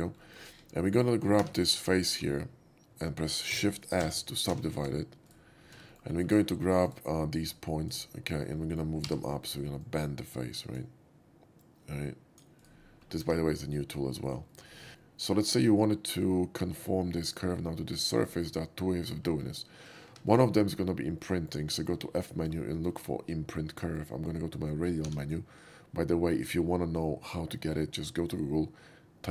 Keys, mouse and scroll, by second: 0.2 middle drag, 0.6 KP_5, 0.8 middle click, 1.5 3, 1.6 click, 2.1 middle click, 3.6 shift+s, 4.2 shift+s, 5.2 right click, 6.0 middle click, 6.2 middle drag, 6.8 alt+right click, 7.4 alt+click, 8.1 alt+middle drag, 8.6 alt+middle click, 9.2 g, 9.7-10.8 drag, 11.6-12.3 drag, 11.8 g, 12.5 right click, 13.3 2, 13.9 middle click, 14.1 middle click, 14.5 shift+middle drag, 15.0-16.3 shift+middle drag, 16.7-17.4 shift+middle drag, 18.4 shift+middle click, 20.1 2, 20.2 click, 21.3 middle click, 21.8 shift+middle click, 22.3 shift+middle drag, 22.7 shift+middle drag, 23.7 shift+middle click, 25.0 shift+q.